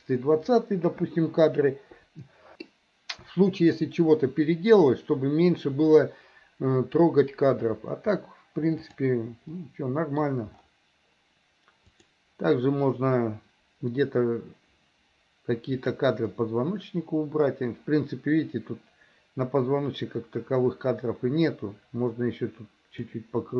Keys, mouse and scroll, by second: 8.8 click, 9.6 middle click, 11.9 click, 15.9 click, 16.4-23.2 drag.